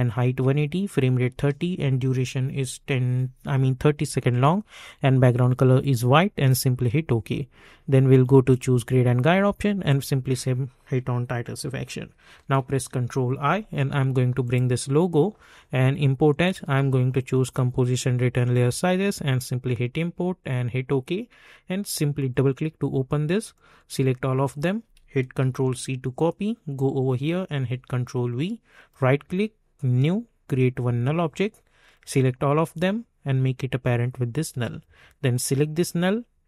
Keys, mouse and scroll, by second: 6.3 click, 12.6 ctrl+i, 14.4-25.4 drag, 25.4 ctrl+c, 26.7 click, 27.5 ctrl+v, 28.7 right click, 29.7-35.3 drag.